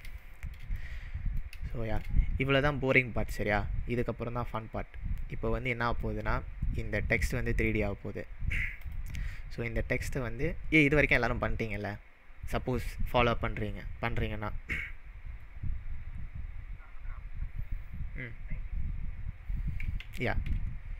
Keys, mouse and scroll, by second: 0.2-1.3 shift+middle drag, 6.0 drag, 6.3-7.8 drag, 8.8 click, 19.8 ctrl+Num_Lock, 20.0 ctrl+z.